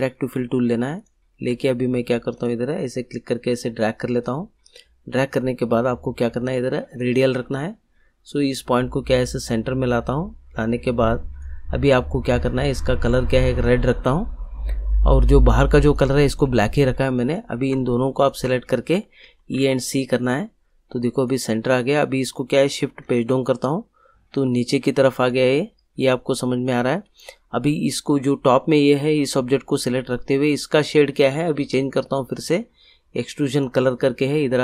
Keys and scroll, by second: 19.2 e, 19.5 c, 23.0 shift+Page_Down.